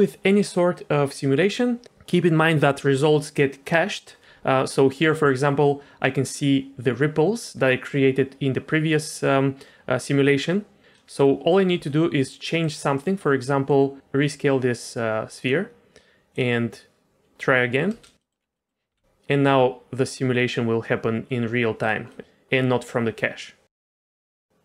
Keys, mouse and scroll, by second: 4.7 middle click, 11.4 middle click, 11.7 s, 12.8 middle click, 13.6 middle click, 16.3 click, 17.9 space, 18.2 middle click, 18.4 scroll down 1, 18.6 middle click, 18.9 g, 22.1 middle click, 22.4 g.